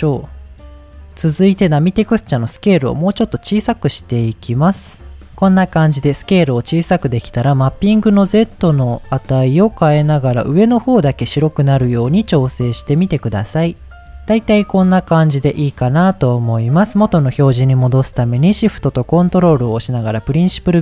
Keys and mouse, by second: 1.9-4.7 drag, 7.7-11.8 shift+drag, 12.5 middle click, 13.9 click, 14.7-15.5 middle drag, 16.3 middle click, 20.5-20.8 middle drag.